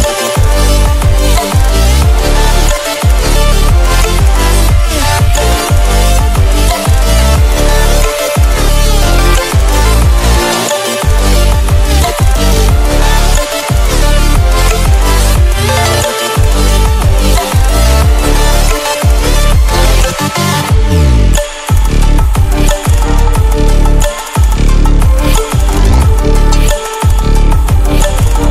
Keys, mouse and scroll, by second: 3.3 scroll down 1, 5.5 scroll up 1, 6.8 click, 7.7 right click, 9.2 click, 10.0 right click, 10.9 click, 15.1 click, 16.5 right click, 19.8 click, 21.5 Right, 22.6 scroll up 1, 22.8 Right, 23.8 scroll down 1, 24.3 Right, 25.5 scroll down 1, 26.3-27.0 typing, 26.5-27.0 scroll up 1, 27.4 click, 27.9 scroll down 1.